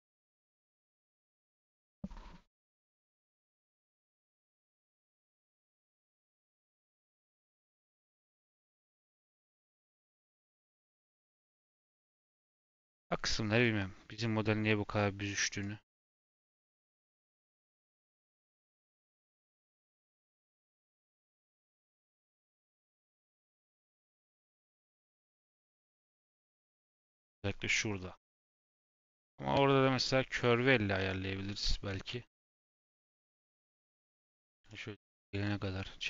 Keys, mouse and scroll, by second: 1.5-3.5 middle drag, 3.5 click, 3.8 click, 4.1 click, 4.7 click, 5.3 click, 5.6 click, 7.8-10.8 drag, 13.6-16.6 drag, 16.7-22.0 drag, 22.5 click, 22.7 click, 23.6-24.7 drag, 24.7-26.7 middle drag, 26.7 scroll up 2, 27.0 middle click, 27.9-29.3 scroll down 3, 29.6 Tab, 30.3 click, 30.9 KP_7, 31.7 shift+middle click, 31.9 scroll up 1, 32.0 g, 34.9 middle click, 35.7 Tab.